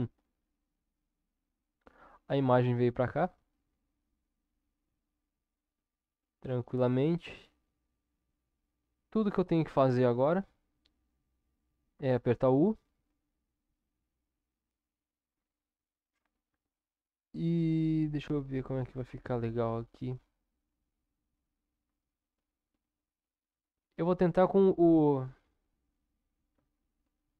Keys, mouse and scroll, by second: 12.4 u, 26.5 u.